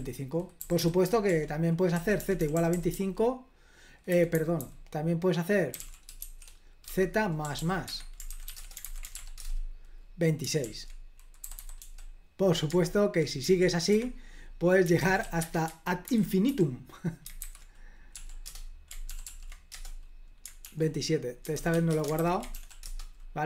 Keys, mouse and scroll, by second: 0.0-2.9 typing, 4.1-9.6 typing, 7.9 Escape, 10.6 super+l, 11.2-12.3 typing, 13.9 Escape, 14.8-16.5 typing, 16.1 ctrl+h, 17.4 super+h, 18.1 p, 18.5 Return, 19.1 ctrl+p, 19.3 ctrl+p, 19.7 Return, 20.6 super+l, 21.3-22.2 typing, 22.6 ctrl+p, 22.9 Return.